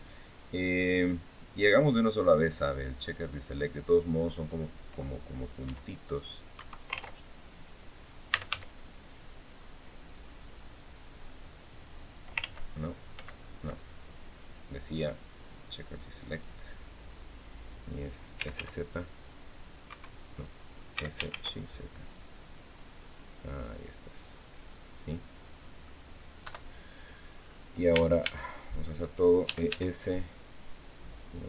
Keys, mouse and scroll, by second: 1.6 click, 3.7 click, 5.3 e, 6.3 Escape, 7.8-8.7 typing, 11.7 click, 12.1 ctrl+z, 12.9 ctrl+z, 15.0 click, 16.0 click, 17.9-18.8 typing, 19.6 Escape, 20.7 s, 21.0 shift+z, 23.8 click, 24.4-25.7 drag, 26.1 KP_7, 26.7 scroll down 1, 27.1-27.5 scroll up 2, 27.6 a, 28.9-29.9 typing.